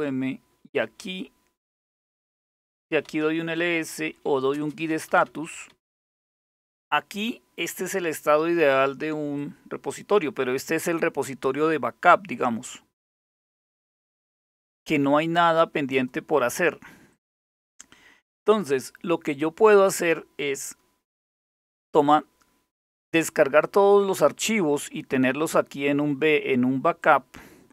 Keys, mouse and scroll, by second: 0.0-5.9 typing, 9.0-12.4 drag, 13.4 click, 15.6 click, 16.7 click, 26.6-27.7 drag.